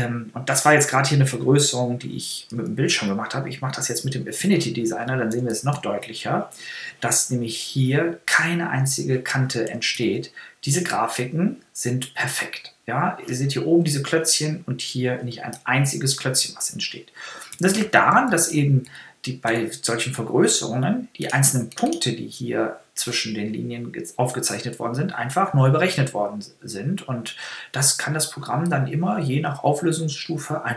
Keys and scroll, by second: 9.7 super++, 15.5 super++, 17.5 super+-.